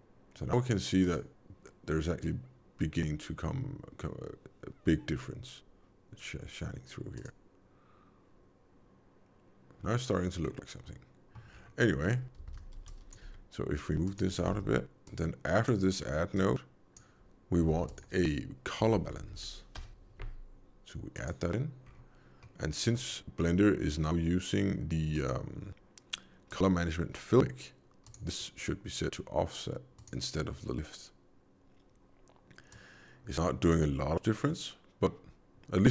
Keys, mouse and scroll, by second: 1.0 click, 7.1 click, 10.3 middle click, 11.5-12.3 scroll down 4, 12.4 alt+a, 12.6 b, 13.2 g, 14.4 alt+a, 15.0 click, 16.3 click, 17.6 shift+a, 21.8-22.4 scroll up 4, 22.4 middle click, 25.1 click, 26.3 click, 28.2 click, 32.7 click, 34.3 middle click.